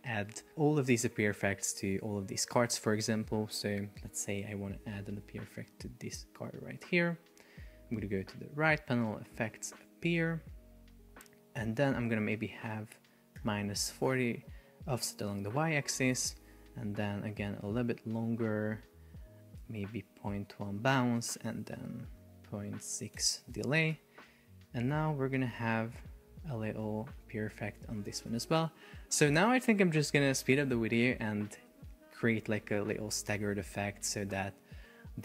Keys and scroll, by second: 13.9 Return, 17.5 Up, 20.0 Down, 21.6 Up, 23.2 Return, 24.0 super+p, 25.6 super+r, 28.3 super+r, 31.9 super+r, 33.7 super+r.